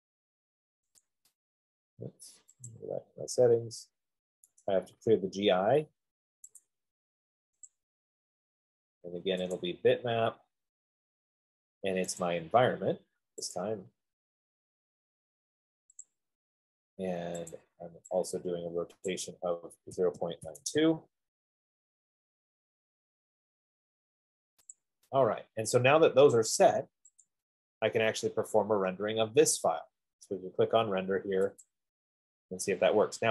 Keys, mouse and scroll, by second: 0.5 click, 1.3 click, 3.0 click, 4.8 right click, 7.0 click, 8.0 click, 9.8 click, 12.6 click, 13.9 click, 16.3 click, 18.1 click, 19.8 click, 20.2-21.0 typing, 22.1-24.4 drag, 25.0 click, 25.0 typing, 27.5 click, 30.0 F15, 32.0 click.